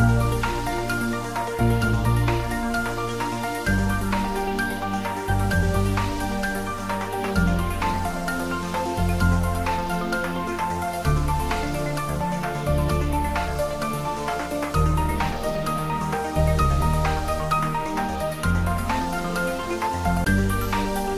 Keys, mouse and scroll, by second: 0.4 click, 0.8 scroll down 1, 2.1-3.1 typing, 9.0-12.2 drag, 12.2 shift+d, 12.6 y, 18.6 click, 20.7-21.1 drag.